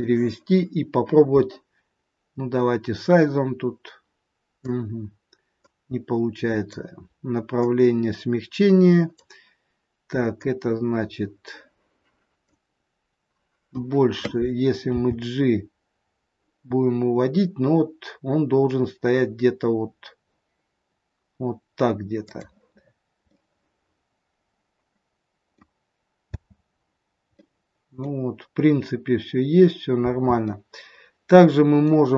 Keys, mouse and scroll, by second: 2.5 click, 5.6 click, 7.5 click, 10.2 click, 15.0 g, 22.7-23.3 scroll up 4, 23.1 middle click, 26.2 space, 27.3 middle click, 30.1 space, 30.6 middle click.